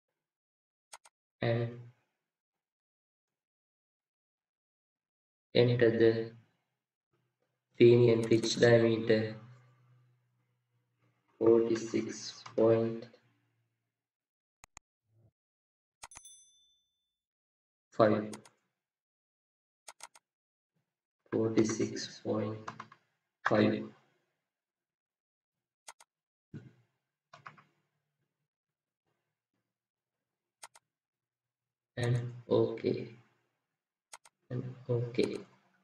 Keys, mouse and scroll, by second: 8.4 double click, 11.2 click, 18.4 typing, 20.0 double click, 21.1 typing.